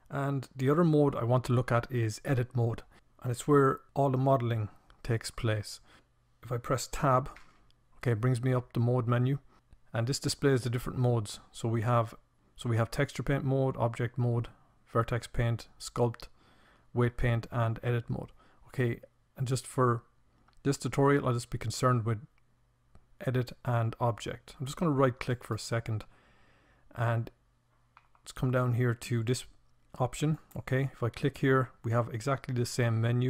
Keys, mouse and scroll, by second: 6.2 Tab.